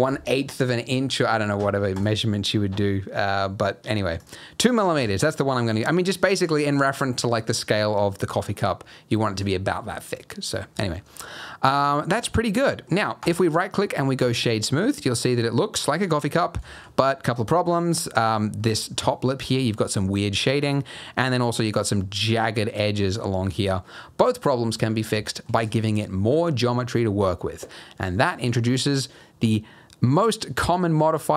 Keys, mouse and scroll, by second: 1.9 click, 4.2 click, 5.3 middle click, 6.1-6.7 scroll down 7, 6.6-7.2 scroll up 2, 7.4-8.0 scroll up 7, 8.0 middle click, 8.4-9.5 scroll down 3, 11.0 scroll down 1, 11.2 middle click, 12.4 scroll up 2, 12.7 middle click, 13.2 right click, 14.6 middle click, 15.2 scroll down 3, 15.5 middle click, 16.3-17.1 scroll up 4, 16.6 shift+middle click, 17.1 middle click, 17.8 middle click, 18.9 middle click, 18.9-19.3 scroll down 4, 19.7 middle click, 20.5 middle click, 20.7-21.6 scroll up 4, 23.3 scroll down 1, 23.9 scroll down 1, 24.0 middle click, 24.4-24.7 scroll up 1, 24.7 middle click, 25.0 scroll down 1, 25.2 shift+scroll up 1, 25.2 shift+middle click.